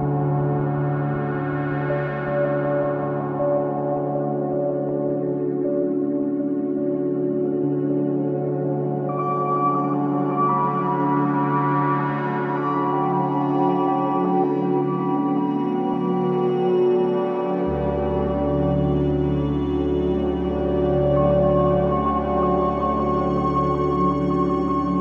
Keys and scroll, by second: 22.4 space.